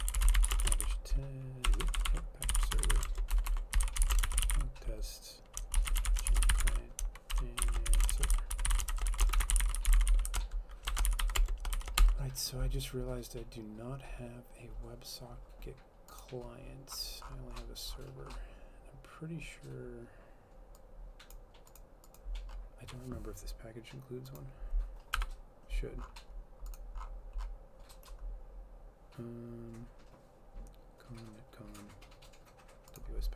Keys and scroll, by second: 0.0-11.8 typing, 3.5 Return, 12.1 Return, 25.2 F12.